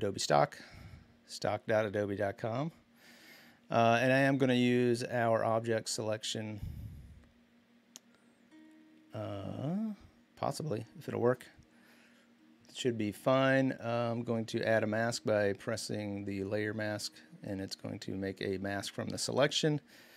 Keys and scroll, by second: 3.7 w.